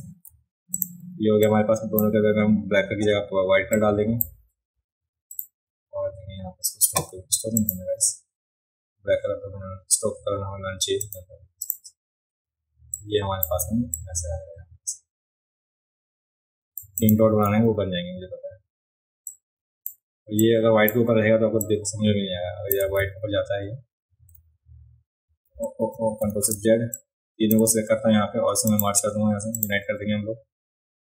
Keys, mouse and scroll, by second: 0.7 click, 0.7 v, 1.4 click, 3.7 click, 5.3 click, 7.6 click, 11.0 click, 11.6 click, 12.9-13.4 drag, 13.9-16.8 drag, 17.0 click, 19.2 click, 20.4-20.9 drag, 21.6 click, 23.0 ctrl+z, 24.3 ctrl+z, 26.2 ctrl+shift+z, 26.9 click, 28.7 shift+click, 29.6 shift+click.